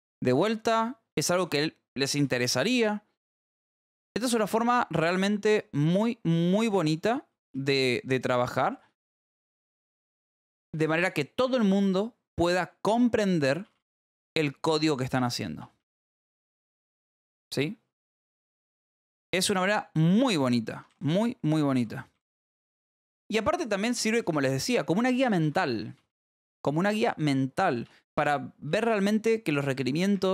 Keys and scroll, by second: 0.0-3.8 typing, 3.2 Escape, 5.0-11.3 typing, 12.2 ctrl+s, 12.9 l, 13.9-19.7 typing, 21.0-25.7 typing, 25.4 Escape, 27.4-30.3 typing.